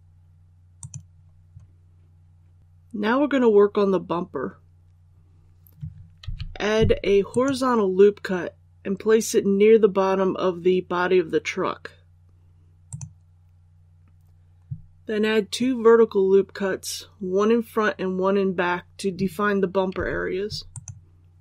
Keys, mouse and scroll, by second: 0.7 click, 2.6-3.9 scroll down 1, 3.9-4.3 scroll up 1, 7.2 click, 20.6 click.